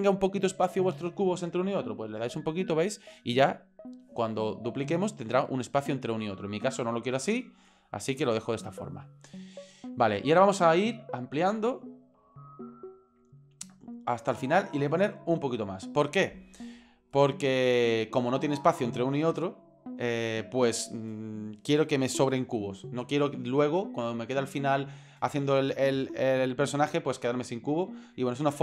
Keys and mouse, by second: 2.4 click, 4.8-6.1 drag, 7.5 click, 11.4-12.7 drag, 13.7 click, 14.9 click.